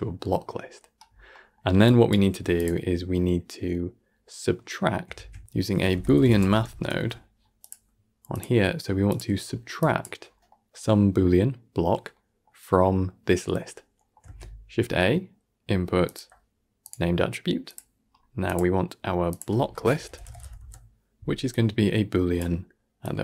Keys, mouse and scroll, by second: 1.0 scroll down 3, 1.2-1.7 middle drag, 1.7 click, 2.2 g, 2.8-5.0 scroll up 1, 5.0 shift+a, 6.0 o, 8.2-9.3 drag, 9.3-9.7 scroll up 4, 9.7 click, 10.1 scroll down 3, 10.4-14.1 middle drag, 14.1 shift+a, 17.8-18.3 scroll up 4, 18.3-22.9 drag.